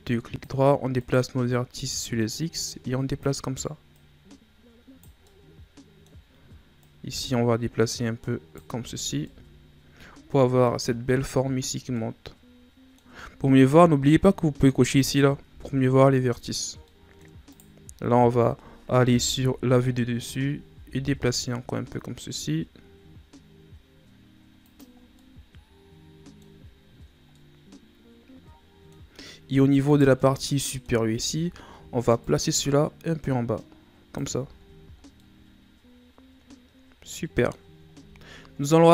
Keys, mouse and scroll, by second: 1.0 right click, 1.9-3.9 drag, 3.9 right click, 5.2-6.3 middle drag, 6.3-6.8 scroll up 2, 6.8 right click, 8.7 Tab, 9.0 scroll down 4, 9.2-14.9 middle drag, 15.0 click, 15.5 Tab, 15.9 scroll up 1, 16.9 middle click, 17.2 scroll up 1, 17.5 right click, 19.1 KP_7, 20.1 shift+scroll down 2, 20.7 g, 25.0 scroll down 3, 25.2-28.1 middle drag, 29.9 right click, 30.2 middle click, 31.0-32.2 scroll up 7, 32.2-34.4 drag, 34.4 Tab, 34.6-35.2 scroll down 5, 35.2-37.9 middle drag, 37.9-38.7 scroll down 5, 38.7-38.9 middle drag.